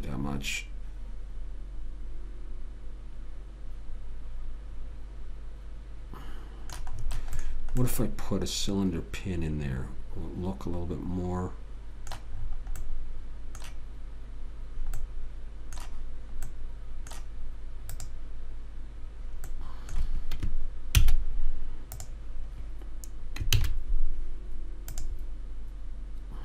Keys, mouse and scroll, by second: 7.3-10.1 middle drag, 13.2-16.2 middle drag, 18.2 click, 20.0-21.3 right drag, 21.3 shift+s, 23.9 shift+a.